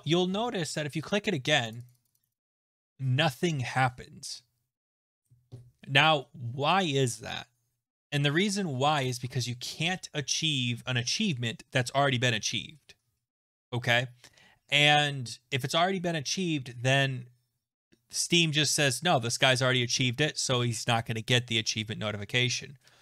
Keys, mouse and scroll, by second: 1.1 click, 1.7 click, 1.9-2.7 click, 2.0 click, 2.1 click, 2.2 click.